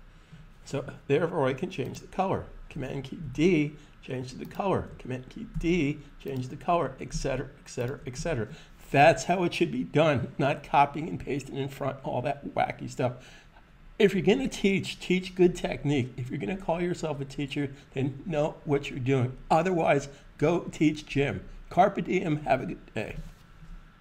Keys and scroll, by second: 3.0 super+d, 5.3 super+d, 7.0 super+d, 8.0 super+d.